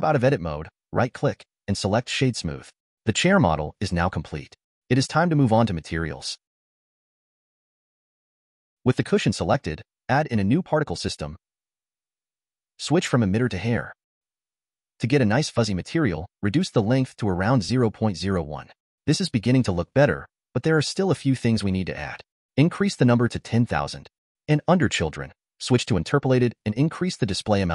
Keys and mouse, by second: 0.2 Tab, 0.8-1.5 drag, 2.8-4.2 middle drag, 8.8 click, 12.4 click, 14.0 click, 17.0-19.4 drag, 20.9-21.6 shift+middle drag, 23.6-24.8 drag, 27.2 click.